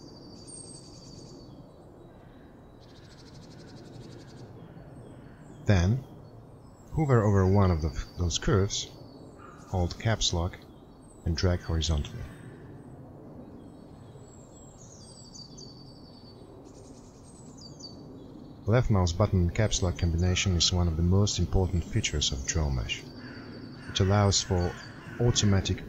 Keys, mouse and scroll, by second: 13.3 Caps_Lock, 13.3 click.